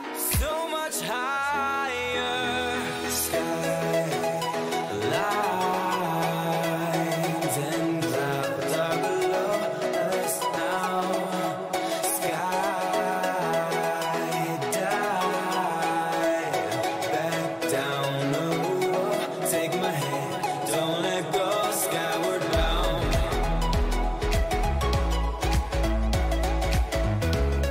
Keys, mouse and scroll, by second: 1.5-3.4 right drag, 2.5-4.3 middle drag, 6.3 ctrl+z, 6.8 ctrl+z, 8.0-10.0 middle drag, 10.3-13.9 drag, 10.8-12.6 middle drag, 14.8-16.8 middle drag, 18.2-22.5 middle drag, 24.7 ctrl+z.